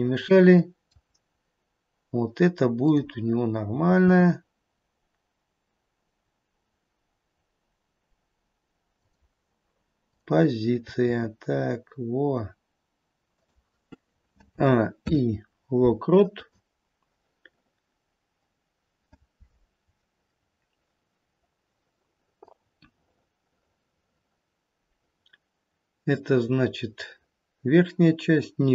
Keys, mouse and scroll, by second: 0.5 middle click, 1.0 middle click, 1.0 scroll down 1, 2.7 click, 3.7 g, 10.1 click, 11.0 g, 14.4 a, 14.9 i, 21.3-22.5 scroll down 2, 22.5 click.